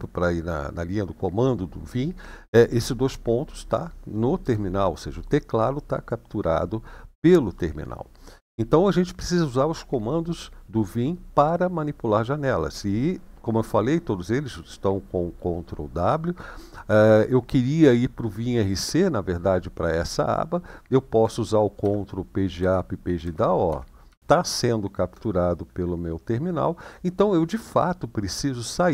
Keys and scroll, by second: 4.2 BackSpace, 21.5 ctrl+Page_Up, 22.3 ctrl+Page_Down, 22.9 ctrl+Page_Down, 23.4 ctrl+Page_Up, 24.1 ctrl+Page_Down, 24.3-24.8 BackSpace.